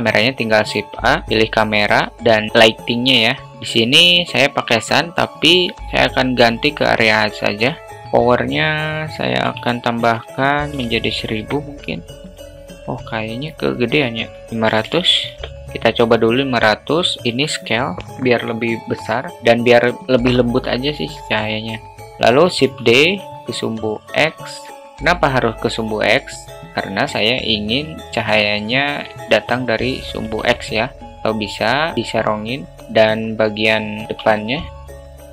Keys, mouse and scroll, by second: 0.4-0.9 middle drag, 1.2 shift+a, 3.5 drag, 7.2 click, 8.5-12.0 drag, 10.7 0, 12.8 alt+middle click, 14.3-15.7 drag, 15.3 0, 16.7 alt+middle click, 17.8 s, 23.3 shift+d, 24.8 alt+middle click, 25.9-27.5 drag, 28.3-30.8 drag, 31.2 click, 32.8 alt+middle click, 34.6 shift+d.